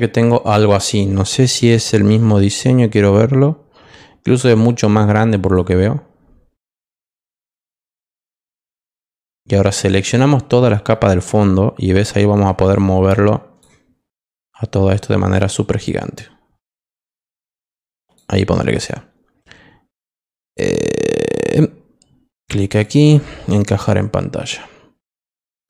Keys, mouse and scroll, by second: 2.3 click, 5.5 click, 7.2 click, 8.2 click, 10.0 click, 12.3-13.6 drag, 14.8 click, 15.8-18.1 drag, 22.6 click, 25.0 click.